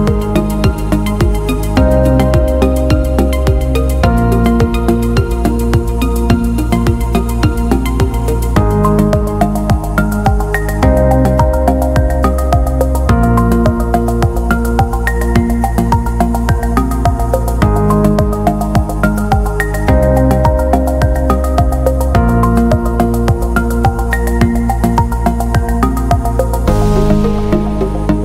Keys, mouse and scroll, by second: 0.5 click, 1.4 click, 2.7 click, 4.1 click, 6.0 click, 7.2-9.2 drag, 10.1 click, 12.7 right click, 13.7 click, 14.6 click, 15.8 click, 17.4 click, 18.3 click, 21.1 click, 21.7 click, 22.6 click, 23.8 click, 24.9 click.